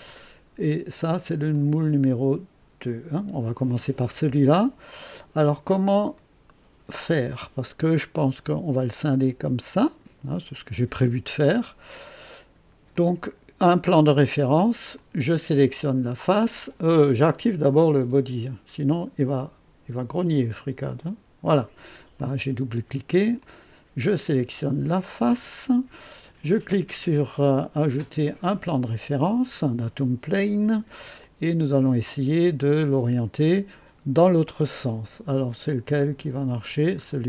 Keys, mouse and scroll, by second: 0.1-0.7 drag, 1.5 click, 3.9 click, 4.8 click, 6.1 right click, 7.3 click, 11.5-12.7 drag, 12.9 click, 14.9 click, 20.8 click, 22.1-23.2 drag, 23.4 click, 24.9 click, 28.2 click, 30.1-31.1 drag, 31.2-33.5 drag, 35.5 click, 36.1-37.2 scroll down 4.